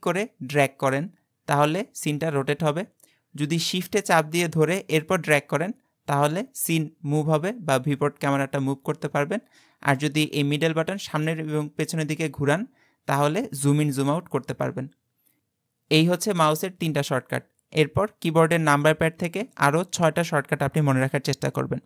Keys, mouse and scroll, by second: 4.9-8.0 shift+middle drag, 11.3-11.9 scroll up 4, 11.9-12.5 scroll down 5, 12.5-13.4 scroll up 4, 13.4-13.9 scroll down 5, 13.9-14.3 scroll up 5, 14.3-14.7 scroll down 5, 14.7 scroll up 3, 15.0-15.4 scroll down 4.